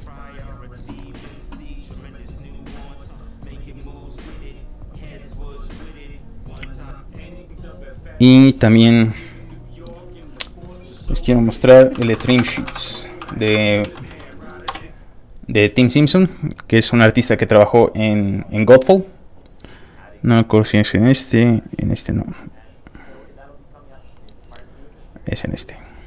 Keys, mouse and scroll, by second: 6.9 click, 7.3 click, 8.3 click, 10.8 click, 11.7-14.3 typing, 14.7 Return, 16.5 click, 19.3 click, 21.6 click, 21.8 scroll down 3, 23.9-24.9 scroll down 4, 25.3 click.